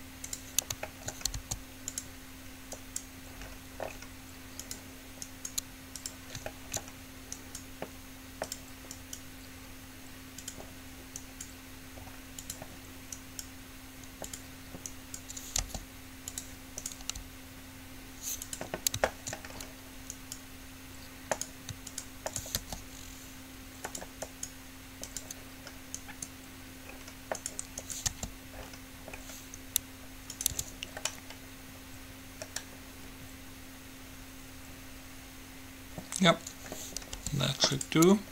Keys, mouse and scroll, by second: 1.1 middle click, 1.6 s, 2.3-4.3 drag, 3.0-4.2 right drag, 4.3 right click, 5.5-7.3 right drag, 7.1 click, 7.3 middle click, 7.6 right click, 7.8 middle click, 8.4-11.1 right drag, 11.4-13.2 right drag, 13.3-15.1 right drag, 15.8-16.8 right drag, 15.8 g, 17.1-18.8 right drag, 17.3 g, 19.3-20.3 middle drag, 20.3-24.1 right drag, 22.8 g, 24.4 right click, 28.3 g, 28.6-29.8 right drag, 30.8 Tab, 31.3 middle click, 37.1 middle click, 37.3 g.